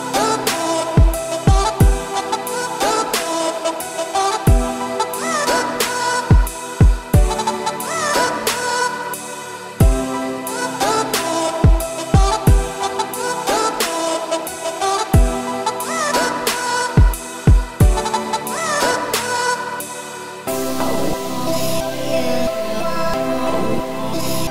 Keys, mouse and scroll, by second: 0.3 x, 1.3 z, 1.7 scroll up 3, 2.0 middle click, 2.7 click, 3.1 click, 3.6 2, 4.0 click, 4.5 shift+click, 5.3-8.0 typing, 6.0 click, 8.6 scroll down 2, 8.8-11.2 middle drag, 11.2 click, 11.6 l, 12.0 scroll down 1, 12.1 middle click, 12.5 `, 13.0 z, 13.4-14.3 scroll up 6, 14.3 g, 18.6 1, 19.3 click, 20.0 scroll up 3, 21.0 g, 24.2 z, 24.4 scroll down 4.